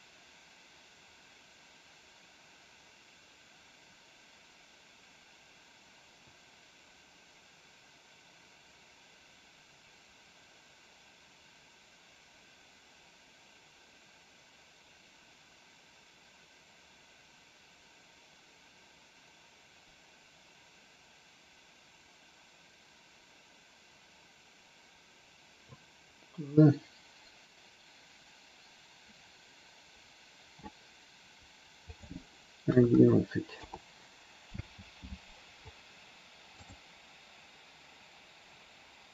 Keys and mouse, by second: 31.8-33.8 drag, 32.9 KP_1, 34.5 space.